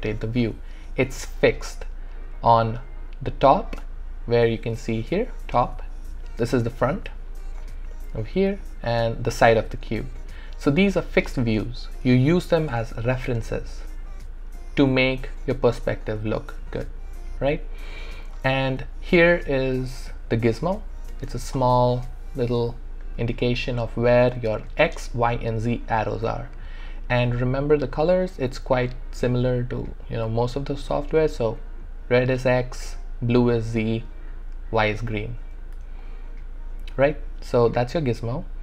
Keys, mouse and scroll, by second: 1.1-15.5 alt+drag, 15.7-21.1 alt+drag, 21.1 space, 23.4-27.4 alt+drag, 27.6 click, 28.5 w, 35.7 w, 36.0 alt+click, 36.0-38.6 alt+drag.